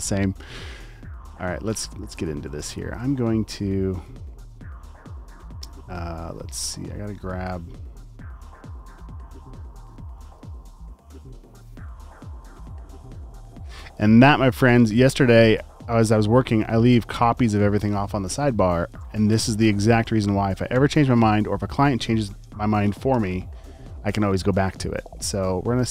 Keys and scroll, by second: 1.6 space, 2.4 space, 2.6 space, 3.9 space, 6.4 space, 7.2 space, 8.6 space, 10.1 space, 10.2 space, 10.9 space, 12.6 space, 16.2 space, 18.5 space, 18.9 space, 20.7 t, 21.3 super+a, 25.5-25.9 typing.